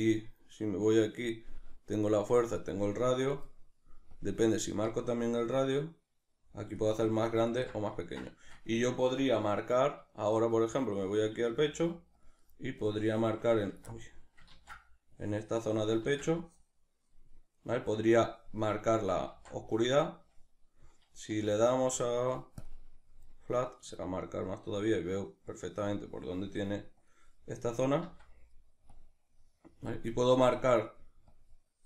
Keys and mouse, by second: 4.2-8.0 drag, 7.6 ctrl+z, 8.0-12.2 ctrl+middle drag, 11.5 f, 12.2 click, 13.7 ctrl+z, 13.7 click, 13.9-15.1 middle drag, 14.5 ctrl+z, 15.1-17.6 drag, 16.1 ctrl+z, 17.6-25.2 middle drag, 19.4 ctrl+z, 21.4 z, 25.2-30.0 drag, 28.1 ctrl+z, 30.0-31.3 middle drag, 31.3-31.8 drag.